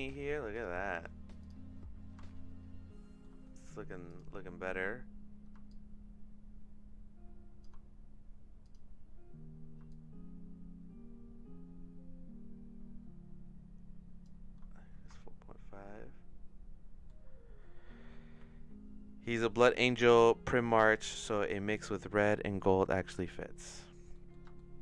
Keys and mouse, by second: 0.5 click, 1.4 click, 2.2-3.2 shift+middle drag, 4.1 click, 4.7 middle click, 5.7-7.6 shift+drag, 8.7 click, 9.8-14.3 shift+drag, 15.1-17.1 shift+middle drag, 24.1 middle click, 24.5 shift+middle click.